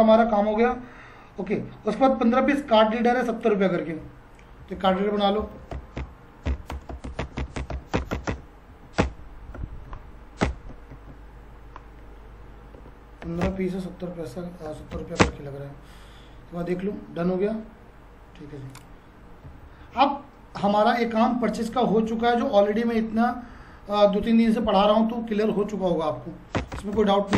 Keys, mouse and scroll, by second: 3.3 click, 4.7 alt+c, 5.2-8.2 typing, 8.7 Up, 9.0 Return, 9.8 Up, 10.4 Return, 10.9 ctrl+a, 13.0-15.4 typing, 16.6 click, 19.4 Down, 25.5 click, 26.5 Return.